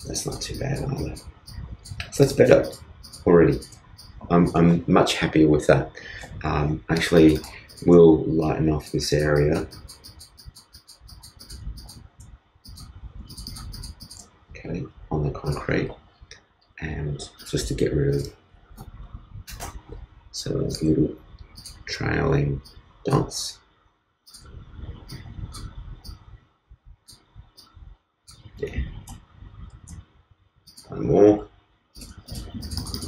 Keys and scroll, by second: 20.3 alt+Return.